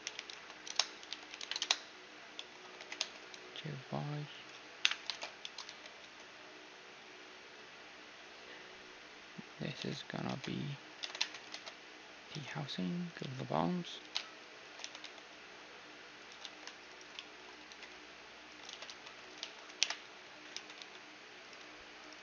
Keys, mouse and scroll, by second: 1.0 r, 1.9 z, 2.4-4.4 middle drag, 2.6 z, 2.8 g, 4.9 KP_1, 5.1 shift+space, 5.4-6.7 middle drag, 5.7 z, 6.5 s, 9.8 z, 10.3 ctrl+Tab, 11.0 ctrl+Tab, 11.5 ctrl+Tab, 12.3 s, 13.2 z, 14.0 s, 15.0 e, 16.4 z, 16.9-18.9 right drag, 17.2-19.1 middle drag, 17.7 e, 18.7 ctrl+z, 18.9 ctrl+z, 19.4 ctrl+z, 19.8 m, 20.5 e, 22.0-22.2 right drag.